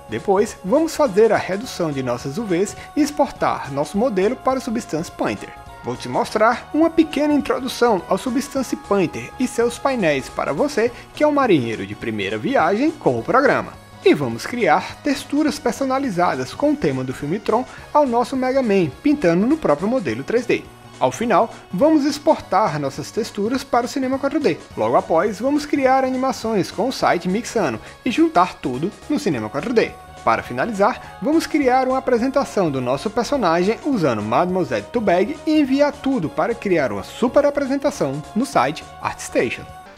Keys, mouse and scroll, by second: 0.2 ctrl+a, 0.4 click, 0.5 ctrl+a, 1.0 click, 1.3 click, 1.8 shift+drag, 2.2 drag, 2.4 click, 2.7 click, 2.8 ctrl+z, 3.8 click, 3.9 click, 4.4 click, 4.7 Delete, 4.8 ctrl+z, 5.5 click, 6.2 click, 6.6 ctrl+z, 6.9 click, 7.7 alt+click, 7.8 alt+click, 8.0 Return, 8.3 ctrl+s, 11.3 click, 11.7 click, 11.9 click, 14.6 ctrl+click, 15.0 ctrl+click, 15.4 alt+click, 15.5 alt+click, 15.7 alt+click, 15.8 ctrl+z, 15.9 ctrl+z, 15.9 alt+click, 16.8 click, 17.8 click, 18.8 click, 19.1 click, 19.7 click, 20.5 alt+middle click, 21.1 click, 21.7 click, 21.8 click, 21.9 alt+click, 22.6 ctrl+click, 23.4 alt+click, 25.8 alt+click, 28.0-28.7 alt+drag, 29.0 click.